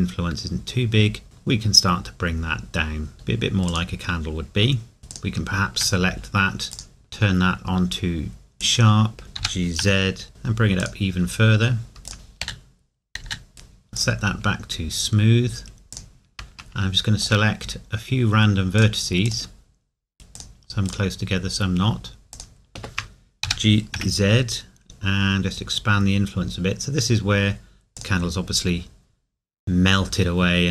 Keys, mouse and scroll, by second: 3.7 click, 5.0 scroll up 1, 5.1 alt+click, 9.4 g, 10.8 click, 11.2 scroll down 1, 12.1 click, 23.4 g, 27.5 scroll down 1, 27.9 click, 28.0 click, 30.1-30.7 scroll up 1.